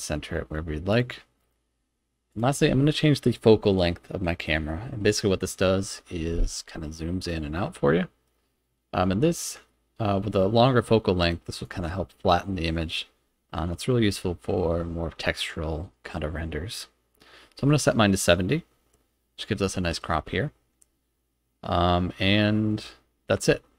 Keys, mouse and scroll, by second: 0.9 click, 2.3 click, 7.3-11.6 drag.